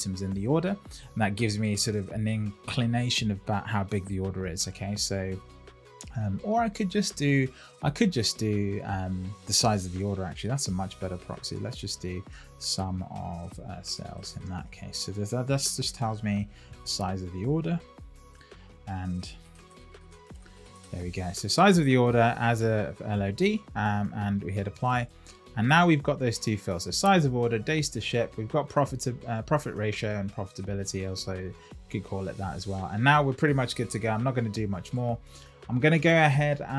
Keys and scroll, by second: 10.5 shift+;, 12.2 Return, 14.6 Return, 16.4 shift+], 18.9 shift+s.